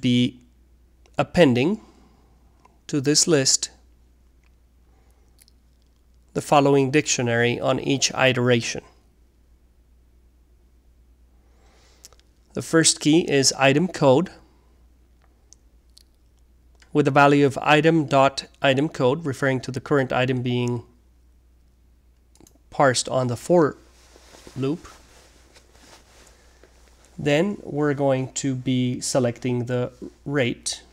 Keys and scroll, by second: 0.0-5.3 typing, 6.6 typing, 11.3-14.8 typing, 17.9-23.6 typing, 24.9 typing, 27.8-29.7 typing.